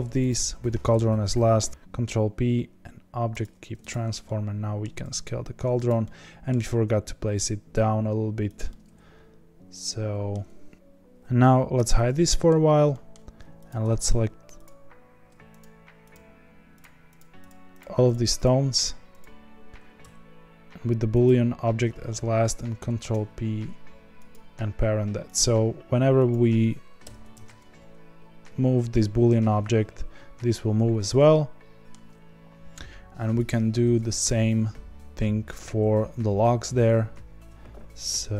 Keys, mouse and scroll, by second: 0.2 shift+click, 3.8 click, 4.2-5.0 middle drag, 5.0 s, 6.0 middle click, 6.6 g, 8.6-10.4 middle drag, 10.4-10.7 scroll down 3, 10.7-11.7 scroll up 2, 11.7 h, 12.3-13.6 middle drag, 13.6 click, 14.0 shift+click, 14.6 shift+click, 16.1 shift+click, 16.7 shift+click, 17.1 shift+click, 17.4 shift+click, 17.7 shift+click, 18.0 shift+click, 18.4 shift+click, 18.7 shift+click, 19.1 shift+click, 24.3 ctrl+p, 25.3 click, 26.2 click, 27.0 g, 31.1-33.3 middle drag, 33.3 click, 34.2 ctrl+click.